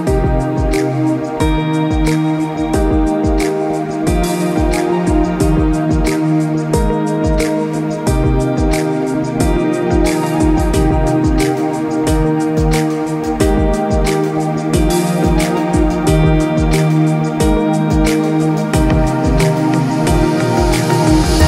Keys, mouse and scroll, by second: 1.1 middle click, 1.5 click, 1.8 middle click, 2.5 middle click, 2.7 middle click, 3.1 middle click, 3.9 shift+a, 5.5 scroll down 4, 5.7 middle click, 6.1 click, 6.9 click, 7.3 click, 8.3 g, 10.8 click, 11.1 middle click, 13.0 click, 13.6 click, 13.9 click, 14.2 middle click, 14.7 middle click, 15.4-16.0 scroll up 4, 16.1 shift+a, 17.6 scroll down 4, 17.9 middle click, 18.7 s, 20.0 r.